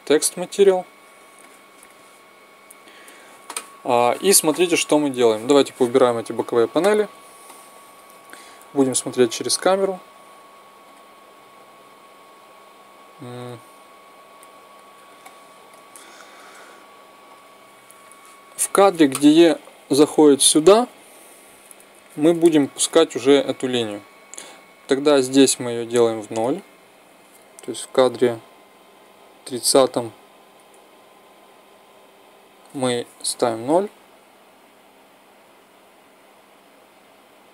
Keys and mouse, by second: 1.1-3.9 drag, 5.5 n, 6.1 t, 8.4 KP_0, 10.5 click, 13.1 click, 13.9 click, 16.9 middle click, 17.9 click, 19.1 Right, 19.7 Left, 20.3 Right, 28.7 Right, 30.5 Right, 31.4 Left, 35.1 KP_0.